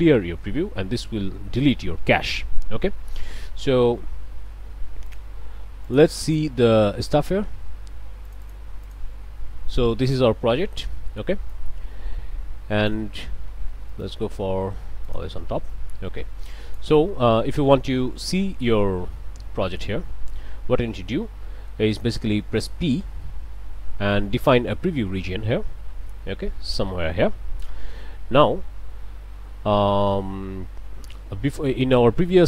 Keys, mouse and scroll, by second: 2.9 click, 5.1 click, 5.9 click, 6.2 click, 8.3 click, 8.9 click, 9.7 click, 11.5-13.1 drag, 13.9 right click, 15.1 click, 15.7-17.0 drag, 17.9-18.4 scroll up 4, 19.7-20.2 scroll down 2, 20.3-21.9 middle drag, 23.4 p, 24.1-26.9 drag, 29.7 middle click, 29.7-30.0 scroll down 2, 30.5 middle click, 30.5 scroll down 2, 31.1 click.